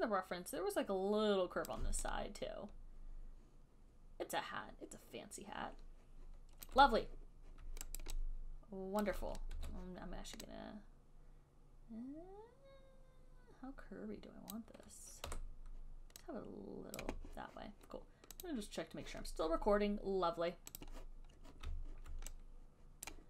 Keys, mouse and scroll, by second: 1.9 click, 2.6 click, 3.6 click, 6.9 alt+click, 8.2 alt+right click, 9.3 alt+click, 9.8 r, 14.7 click, 15.5 w, 17.3 click, 18.7 click, 21.0 click.